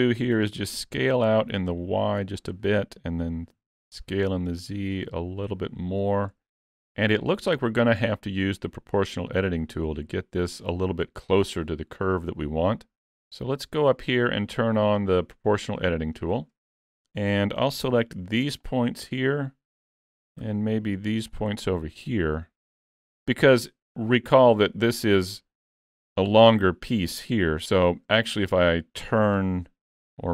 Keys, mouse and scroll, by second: 0.3 s, 3.6 s, 15.7 click, 16.6 alt+a, 17.9 b, 20.4 b, 23.3 middle click, 24.3-24.9 scroll down 5, 24.7 middle click, 25.7 z, 26.6 middle click, 27.9 Tab, 28.2-28.8 scroll down 3, 29.3 click.